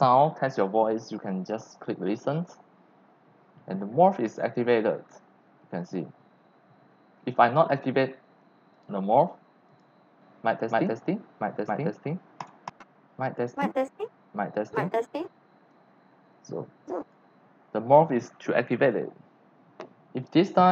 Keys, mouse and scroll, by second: 8.7 click, 9.7 click, 12.4 click, 17.0 click, 20.5-20.7 drag.